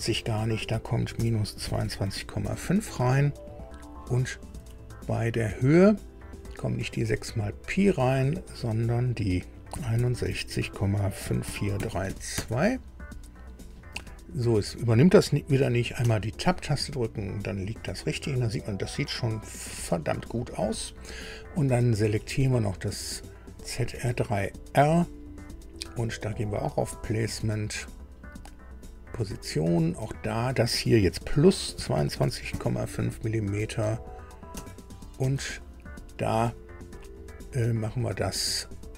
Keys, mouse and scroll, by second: 1.1 KP_Subtract, 1.6 KP_2, 1.8 KP_2, 2.0 KP_Decimal, 2.4 KP_5, 4.6 Tab, 5.9 click, 7.1 click, 9.7-12.1 typing, 12.3 KP_Enter, 16.0 Tab, 18.1 scroll up 2, 19.8 scroll down 2, 23.7 click, 26.5 click, 29.1 click, 30.1 click, 31.7 KP_2, 31.9 KP_2, 32.2 KP_Decimal, 32.5 KP_5, 35.3 Tab.